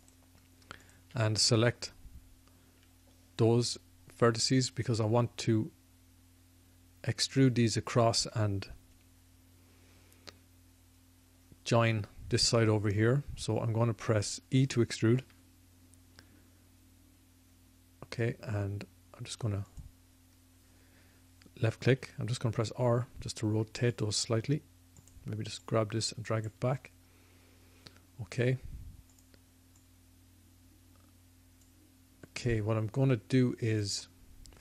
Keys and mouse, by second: 15.2 e, 21.9 r, 24.5-31.6 drag, 33.7-34.6 drag.